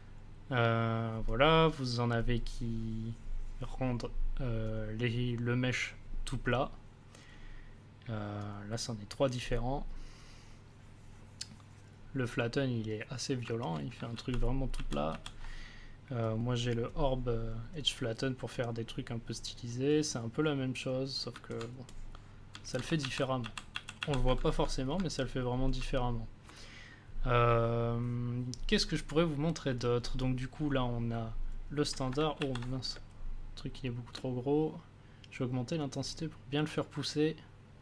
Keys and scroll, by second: 14.1 ctrl+z, 23.0 ctrl+z, 32.3 ctrl+z, 32.9 space.